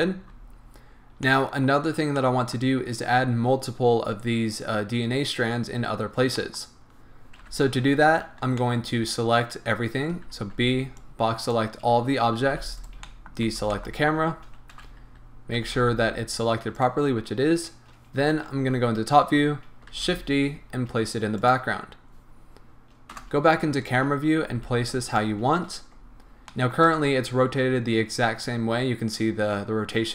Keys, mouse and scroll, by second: 0.0-1.2 drag, 0.9 scroll down 2, 1.2-8.6 middle drag, 1.7-2.2 scroll down 2, 7.4 KP_1, 10.3 b, 12.8 right click, 13.0 middle click, 13.5 b, 14.7 KP_1, 15.6 g, 16.8 right click, 17.2 scroll down 1, 18.6 KP_7, 19.9 shift+d, 21.5 click, 23.1 KP_0, 24.0 scroll up 1, 24.7 s, 25.2 click, 25.5 scroll down 1, 26.5-27.8 shift+middle drag, 27.8 scroll up 1.